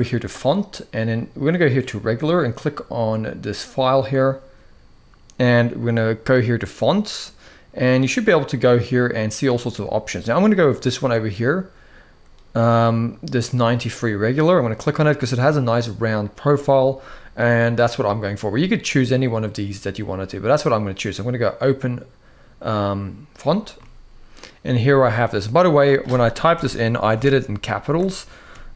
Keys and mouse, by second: 3.3 click, 26.3 BackSpace, 26.9 m, 27.6 BackSpace, 28.5 shift+m.